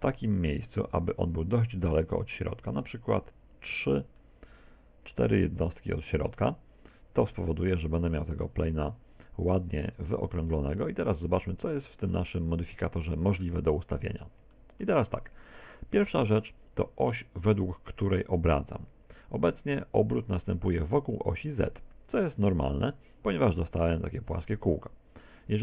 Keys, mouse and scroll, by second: 1.7 click, 4.3 middle click, 7.1 z, 7.4 middle click, 10.6 middle click, 11.7 middle click, 12.7 middle click, 14.6 shift+middle click, 24.5 middle click.